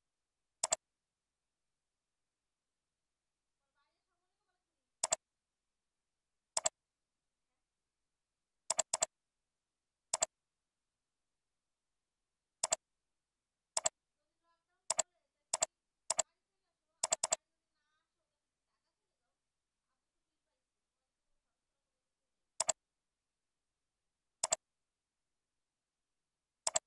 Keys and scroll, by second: 20.6 ctrl+b, 21.3 ctrl+u.